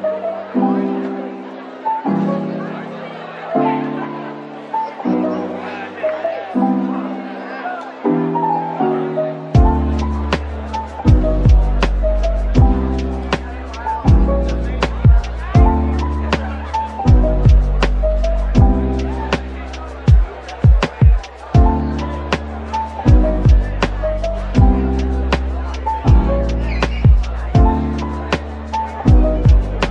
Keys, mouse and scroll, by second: 0.8 Tab, 2.1 shift+click, 5.3 shift+click, 6.8 scroll down 1, 7.2 middle click, 7.7 shift+click, 8.4 shift+click, 9.1 shift+click, 10.5 /, 11.5 scroll down 1, 11.5 middle click, 12.3 scroll up 1, 13.5 shift+right click, 13.9 typing, 16.7 scroll down 1, 17.5-21.0 typing, 18.6 middle click, 19.9 Tab, 21.1-21.7 scroll up 1, 21.7 double click, 22.3 typing, 23.4 alt+click, 25.6 typing, 26.3 right click, 26.9 typing, 27.3 right click, 27.9-28.3 typing.